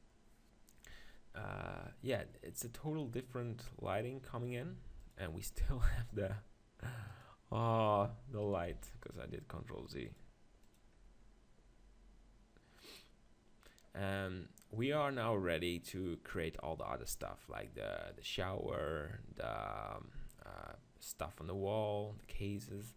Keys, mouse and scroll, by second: 3.1-4.5 middle drag, 6.1-7.7 drag, 8.4-10.5 right drag, 8.7 x, 10.1-12.3 drag.